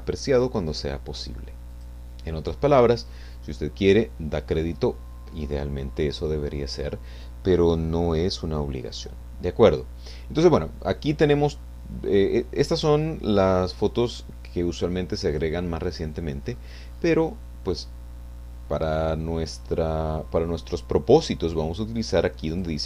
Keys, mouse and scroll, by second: 1.7 click, 11.0-11.8 scroll down 3, 13.0-15.8 drag, 15.8-16.1 scroll down 1, 16.5-17.2 scroll up 4, 22.6 click.